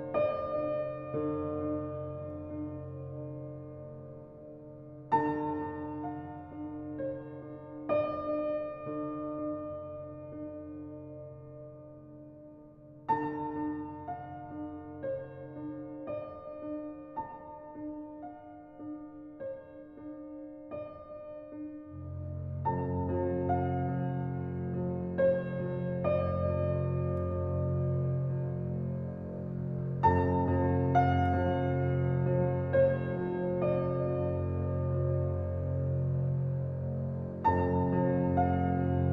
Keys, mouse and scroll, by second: 0.1 scroll up 7, 0.7 ctrl+b, 3.6-4.9 shift+middle drag, 4.9 e, 6.5 middle click, 7.3 s, 8.9-9.2 scroll down 3, 9.2 Tab, 9.4-9.7 middle drag, 9.7-10.1 scroll down 4, 10.1 middle click, 10.4 click, 10.6-12.1 scroll down 1, 13.2 middle click, 14.2 shift+a, 15.4-16.2 middle drag, 16.2 g, 17.7 alt+middle click, 18.3 s, 19.1 alt+middle click, 19.8 s, 21.0 s, 21.9 g, 23.1-23.5 middle drag, 23.5-24.1 scroll up 4, 24.1 g, 25.3 s, 26.9 middle click, 27.7 s, 28.9-29.6 middle drag, 29.6-30.4 scroll up 4, 29.8 shift+middle click, 30.4-30.8 shift+middle drag, 30.8 g, 32.8 Tab, 33.5 click, 34.7 alt+z, 34.9 click, 36.0 g, 38.1 scroll up 4, 38.3-39.1 middle drag.